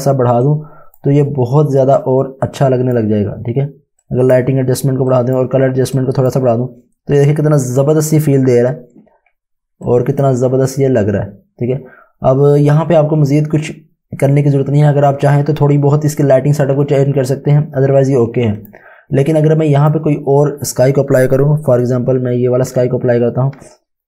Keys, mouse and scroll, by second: 9.8 click, 18.6 click.